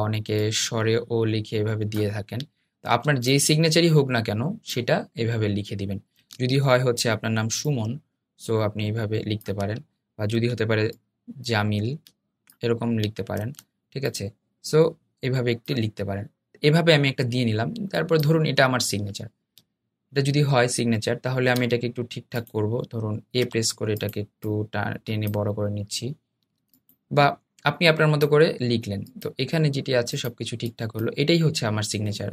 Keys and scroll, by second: 23.3 a.